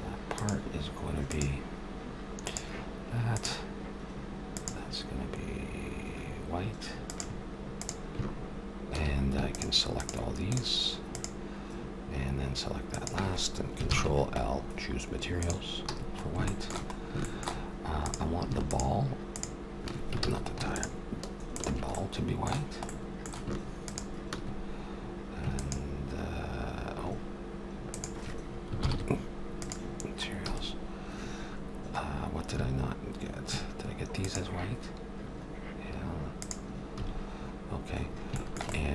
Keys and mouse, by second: 2.6 click, 3.1 click, 4.0-6.4 drag, 7.8-12.8 drag, 13.0 click, 13.8 ctrl+l, 14.5 click, 15.9 a, 16.1-17.4 middle drag, 18.0-22.0 drag, 20.2 ctrl+z, 22.9 click, 23.5 middle click, 23.9-27.4 drag, 24.3-25.4 right drag, 27.4 middle click, 27.9-29.6 drag, 28.8 ctrl+l, 30.5 a, 34.2-36.1 drag, 36.0 middle click, 36.4-38.3 drag, 37.0 a, 38.3 middle click.